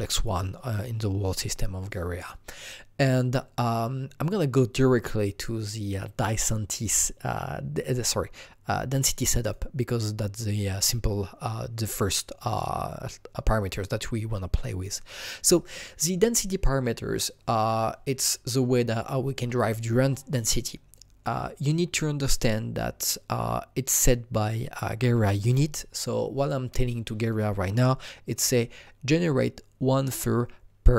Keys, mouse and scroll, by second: 9.4 click.